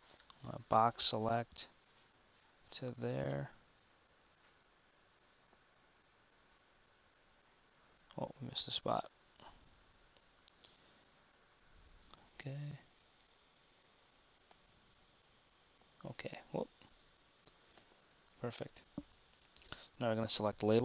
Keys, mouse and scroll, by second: 9.0 KP_1, 10.4 KP_3, 12.3 b, 18.7 KP_1.